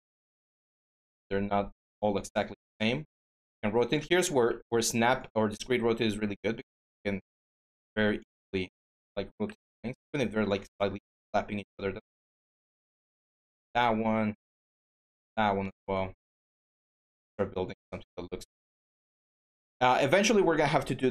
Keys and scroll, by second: 2.1 e, 3.3 ctrl+a, 3.8 ctrl+z, 4.7 e, 9.8 w, 11.4 e, 18.4 w, 19.7 ctrl+z.